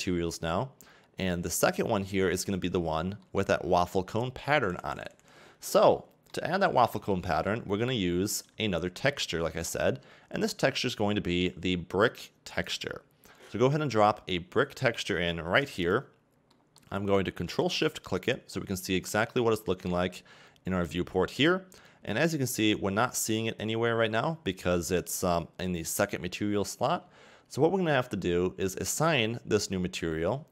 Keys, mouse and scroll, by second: 3.2 middle click, 18.3 ctrl+shift+click, 22.9-23.6 scroll down 5, 23.6-24.2 scroll up 2, 24.2-26.8 scroll up 1, 26.8-27.7 scroll up 1, 28.4-30.5 scroll up 1.